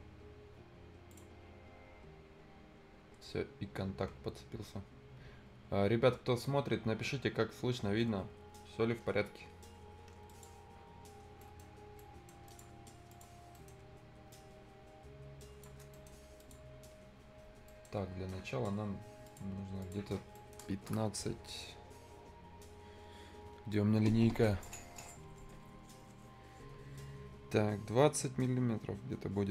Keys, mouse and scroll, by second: 1.1 click, 10.2 click, 11.0 scroll down 1, 11.2 scroll up 1, 11.3 right click, 11.6 scroll down 1, 11.9 right click, 12.4 click, 12.8 scroll up 1, 13.0 click, 13.3 scroll down 1, 13.5 right click, 14.3 shift+click, 15.9 right click, 16.3 click, 17.6 right click, 19.2 click, 20.3 scroll down 1, 20.3 right click, 20.8 Return.